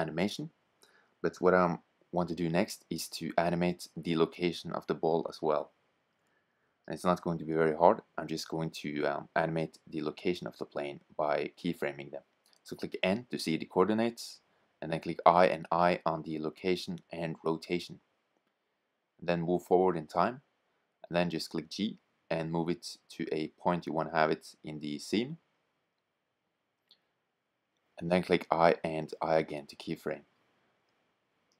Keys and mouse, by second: 1.8-3.7 drag, 3.9-5.5 right drag, 5.5-7.4 drag, 12.4 n, 14.0 i, 14.7 i, 16.4-17.3 drag, 17.4 click, 18.0 click, 20.4 g, 28.1 i, 28.8 i, 30.7 click.